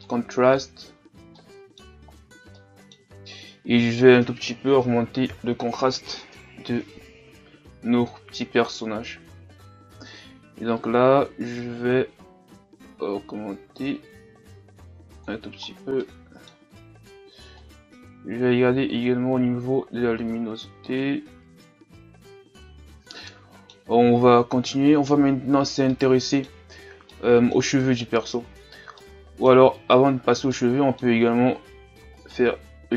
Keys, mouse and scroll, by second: 0.6-2.7 drag, 11.1-13.7 drag, 15.7 scroll down 2, 16.0-17.9 middle drag, 17.9-20.6 drag, 22.8-23.9 middle drag, 23.9 a, 24.7-28.4 middle drag, 28.4-28.9 scroll up 2, 28.9 middle click, 29.8-30.5 scroll down 4, 30.5 middle click, 31.2-31.9 scroll up 1, 31.9 scroll up 1, 32.2-32.9 right drag.